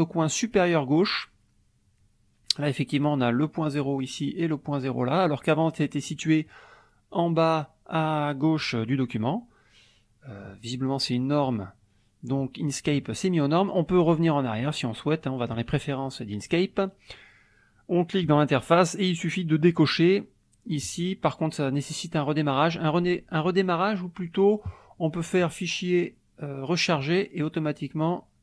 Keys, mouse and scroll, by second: 6.1 middle click, 9.2-10.6 middle drag, 12.4 click, 15.5 click, 18.2 click, 20.8 click, 24.3 click, 27.0 click.